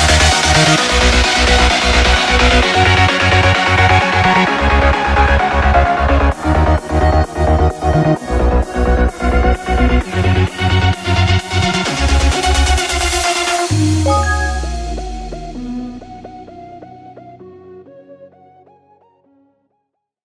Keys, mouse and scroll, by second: 9.8 ctrl+d, 10.3 ctrl+d, 10.8 ctrl+d, 11.3 ctrl+d, 11.8 ctrl+d, 13.2 ctrl+d, 13.6 ctrl+d, 13.9 ctrl+d.